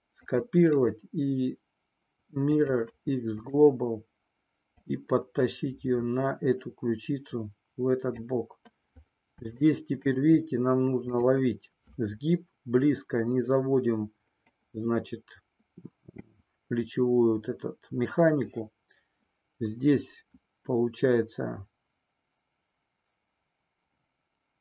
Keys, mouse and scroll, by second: 0.3 click, 2.2-4.8 right drag, 4.8-8.2 drag, 9.6 shift+middle click, 11.2 click.